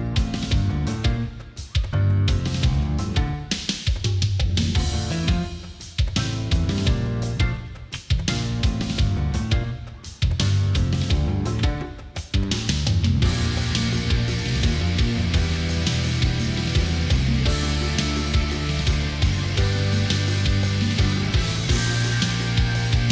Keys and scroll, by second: 2.6 space, 8.1 ctrl+z, 8.4 ctrl+z, 10.9 ctrl+z, 14.9 Right, 15.0 Down, 15.1 Right, 15.3 Down, 15.9 Delete, 16.3 Down, 16.5 Up, 16.6 Right, 16.7 Down, 17.5 Left.